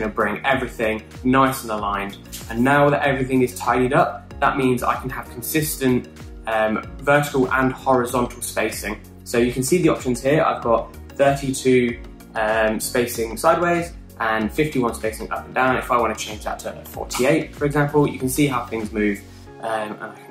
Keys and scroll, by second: 16.9-18.0 typing.